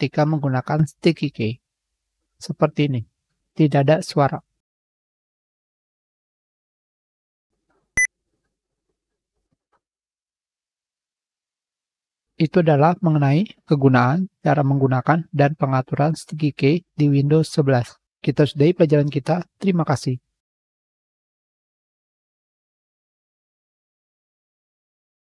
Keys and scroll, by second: 6.7 ctrl+alt+×, 7.1 ctrl+alt+ó, 7.2 ctrl+alt+í, 8.7 ctrl+alt+shift+ö.